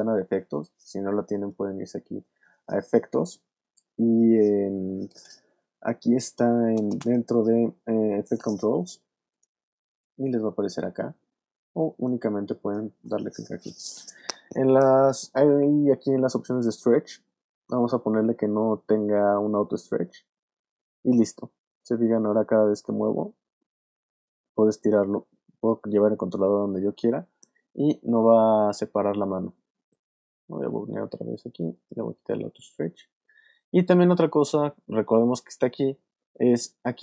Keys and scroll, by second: 28.3 super+z.